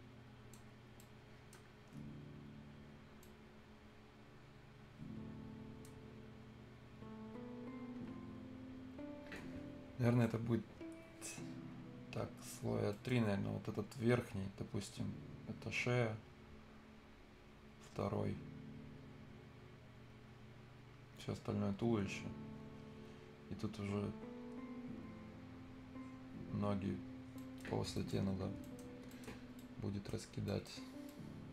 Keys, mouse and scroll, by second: 0.7 scroll up 1, 0.9 right click, 1.6-2.1 scroll down 1, 2.1-2.4 scroll up 1, 3.2-5.9 right drag, 5.9 scroll down 1, 6.1-6.4 scroll up 1, 12.4-12.7 scroll down 1, 12.7 scroll up 1, 12.9 right click, 26.8 scroll down 1, 27.3 right click, 27.6 scroll down 1, 27.9 right click, 28.2 scroll up 1, 28.8 scroll down 1, 29.1 right click, 29.3 scroll up 1, 29.5 right click, 30.2 scroll down 1, 30.4 right click, 30.8 scroll up 1, 31.3 right click.